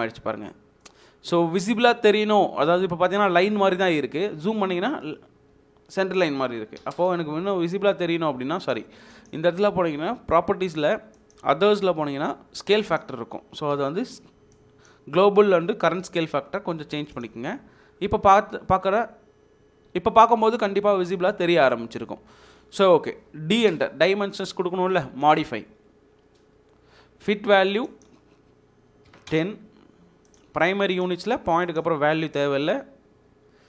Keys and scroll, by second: 6.7 d, 6.9 space, 13.7 3, 23.5 d, 23.7 space, 29.1 typing.